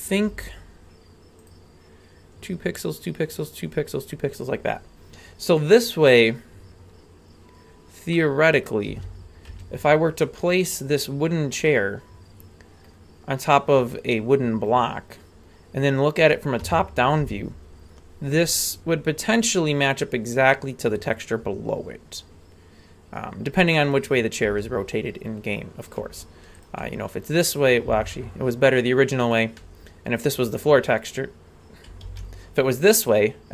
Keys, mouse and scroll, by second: 0.2 g, 8.1-8.6 middle drag, 8.9 a, 9.2 scroll down 1, 9.5 Tab, 11.2 scroll down 1, 11.6-12.9 middle drag, 16.6 KP_7, 23.8 right click, 24.4 r, 27.8 r, 32.1 ctrl+z.